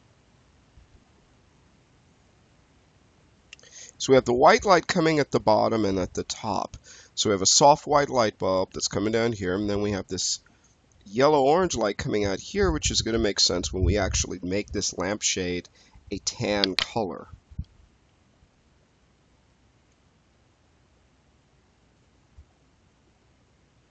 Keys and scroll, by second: 20.2 space.